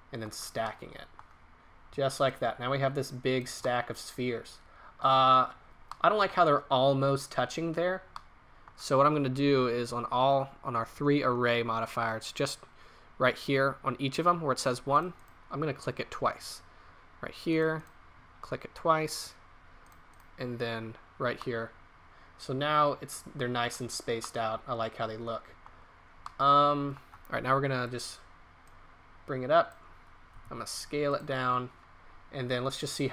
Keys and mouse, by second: 4.1-5.3 drag, 6.0-7.3 drag, 14.9-17.3 middle drag, 17.5-19.5 middle drag, 22.0-22.9 middle drag, 23.3-24.4 middle drag, 24.9 middle click, 25.1 middle click, 30.3 s.